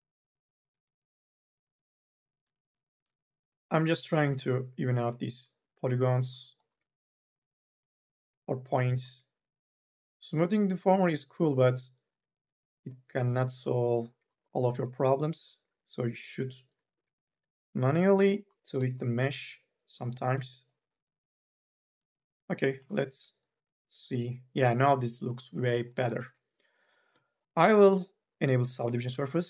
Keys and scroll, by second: 0.7 2, 2.5 1, 19.2 2.